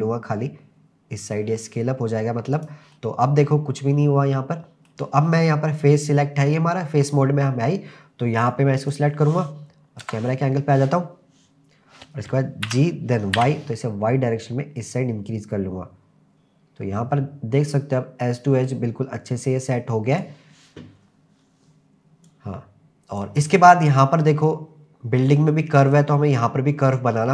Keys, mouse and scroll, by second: 2.6 click, 2.9-4.9 middle drag, 8.8 click, 10.1 KP_0, 12.7 g, 13.4 y, 20.1 click, 21.0-21.7 scroll up 2, 22.3-23.3 drag, 23.5-24.2 scroll up 3, 24.3-25.4 scroll down 2.